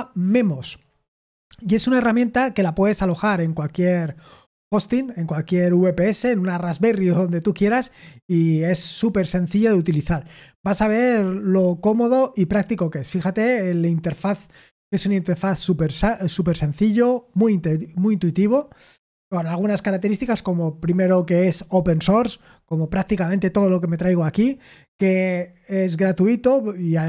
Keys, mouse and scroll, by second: 12.7-16.4 scroll down 1, 16.4-17.2 scroll down 1, 17.2 scroll down 1.